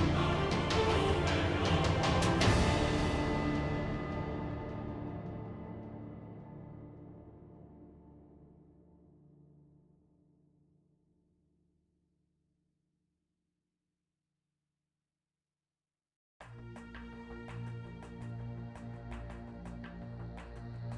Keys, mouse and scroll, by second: 0.4 g, 1.3 g, 1.9 ctrl+Tab, 4.6 F6, 4.6 i, 7.4 ctrl+Tab, 9.6 ctrl+Tab, 10.0 z, 11.1 KP_Decimal, 11.3 KP_1, 11.9 e, 13.3 z, 13.8 z, 14.1 x, 15.5 x, 15.7 ctrl+Tab, 16.6 ctrl+Tab, 17.1 s, 17.8 z, 17.9 Tab, 18.2 Tab, 19.5 KP_3, 20.3 ctrl+Tab, 20.8 e.